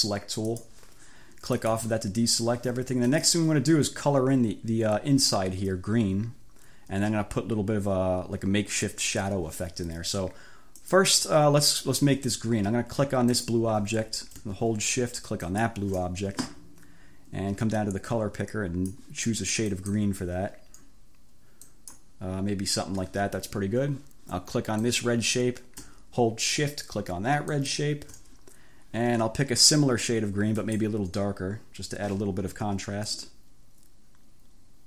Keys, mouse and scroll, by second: 0.5 click, 1.7 click, 3.1 click, 10.8 click, 13.3 click, 15.5-15.9 shift+scroll down 2, 17.8-19.2 drag, 19.8 click, 21.7 click, 24.8 click, 27.6 shift+click, 30.7 click, 33.2-34.8 drag.